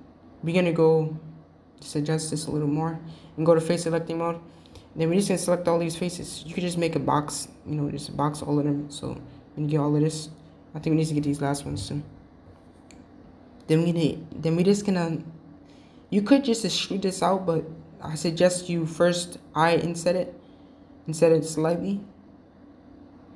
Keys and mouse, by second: 1.2 click, 1.8 g, 4.5 click, 5.8-8.9 drag, 10.1-11.2 middle drag, 11.2 shift+click, 11.6 shift+click, 12.0 shift+click, 12.9 shift+click, 14.2-15.0 middle drag, 15.3-16.9 middle drag, 18.4 i.